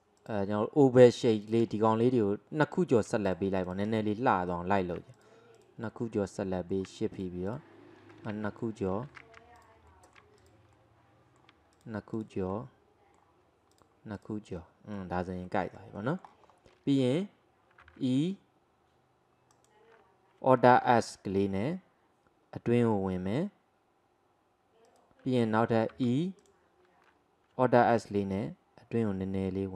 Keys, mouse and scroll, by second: 0.2 click, 1.0 click, 1.4 shift+drag, 1.8-3.3 middle drag, 3.3 shift+drag, 3.7 shift+click, 4.0-5.2 middle drag, 5.2 shift+click, 5.6 shift+drag, 6.0-7.2 middle drag, 7.5 shift+click, 8.4 ctrl+z, 8.7 middle click, 9.1 ctrl+z, 9.6 shift+click, 10.0 middle click, 10.4 shift+click, 10.8-11.8 middle drag, 11.8 shift+click, 12.6-13.8 middle drag, 13.8 shift+click, 14.2 shift+click, 14.6-16.5 middle drag, 16.5-17.9 scroll up 2, 17.9 e, 20.8 alt+s, 26.0 e, 27.9 alt+s.